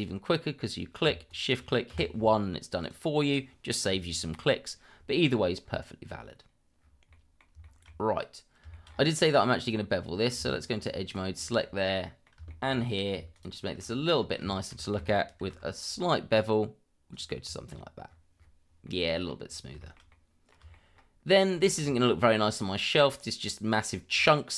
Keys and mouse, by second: 1.3 shift+click, 1.9 1, 2.8 click, 7.1 middle drag, 7.6 shift+middle drag, 8.7 shift+middle drag, 9.6 click, 10.4 Tab, 11.0 click, 11.9-12.2 middle drag, 12.5 shift+middle click, 13.3 shift+click, 13.6 shift+middle click, 14.4 shift+middle drag, 15.4 ctrl+b, 17.4 Tab, 18.8-19.3 middle drag, 19.8 shift+middle click, 20.1-20.5 middle drag, 20.7 shift+middle drag, 21.3 click, 21.6 shift+middle drag, 22.2-22.8 middle drag, 24.1 Tab.